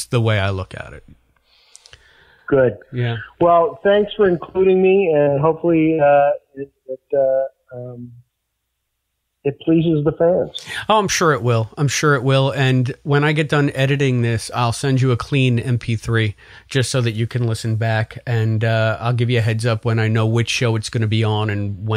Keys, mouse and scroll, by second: 3.9-6.7 drag, 7.7 click, 10.6 click, 12.0-21.5 drag.